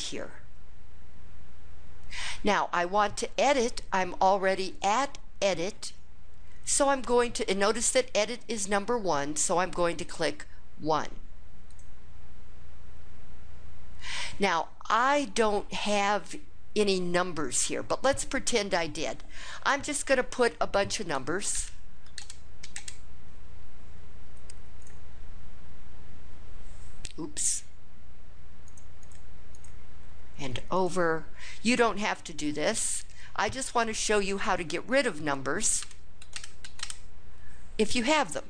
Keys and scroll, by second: 11.4 1, 21.2 1, 21.3 Return, 21.8 1, 21.9 Return, 22.4 1, 22.5 Return, 28.5 Up, 28.8 Up, 29.3 Up, 30.5 Right, 33.4 2, 35.6 Return, 36.0 2, 36.1 Return, 36.4 2, 36.6 Return.